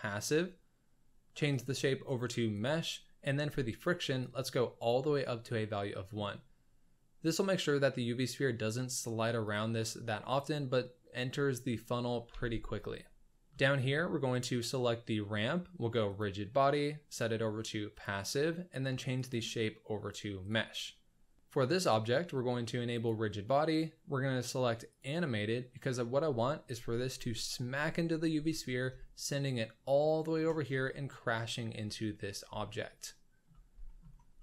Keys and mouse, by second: 1.6-2.7 drag, 4.2 click, 5.4-6.1 middle drag, 9.5 drag, 12.3 alt+a, 12.8 click, 12.9-13.5 middle drag, 14.3 click, 16.0 click, 17.1-18.1 drag, 19.1-20.6 drag, 23.2-25.0 drag, 28.9-30.4 shift+middle drag, 32.6-33.4 shift+middle drag, 33.8 shift+middle drag, 34.3 middle drag.